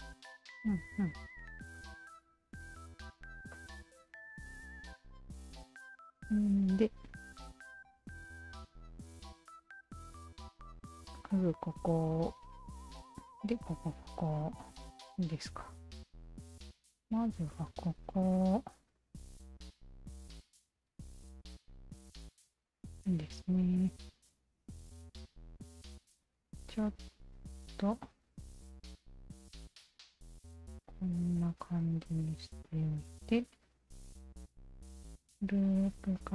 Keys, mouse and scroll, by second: 1.1 alt+right click, 1.8-3.0 alt+drag, 3.5 alt+click, 3.9 alt+right click, 4.5 alt+right click, 4.9-6.5 alt+drag, 7.5 alt+click, 16.1 alt+click, 17.7 alt+right click, 18.4 2, 19.0 alt+right click, 19.2 alt+right click, 19.6 alt+click, 20.4 alt+click, 21.2 shift+click, 21.8 q, 22.2 s, 24.0 1, 24.4 click, 26.1 w, 26.5-28.2 alt+drag, 28.6-30.2 alt+drag, 30.5-34.0 alt+drag, 34.7 shift+q, 36.0 alt+click.